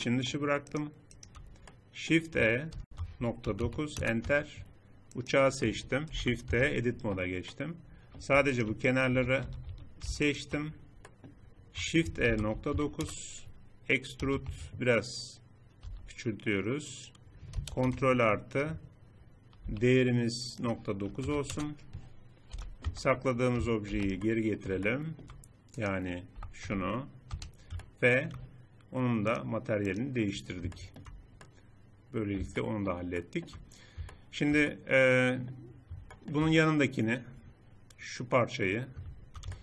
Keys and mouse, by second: 2.5 shift+e, 4.0 Tab, 5.8 shift+h, 6.2 Tab, 9.0 a, 9.2 a, 9.5 a, 12.0 shift+e, 14.0 e, 15.6 s, 17.4 ctrl+KP_Add, 19.4 n, 22.2 n, 22.6 Tab, 23.6 alt+h, 26.2 g, 31.0 middle click, 36.0-37.0 middle drag.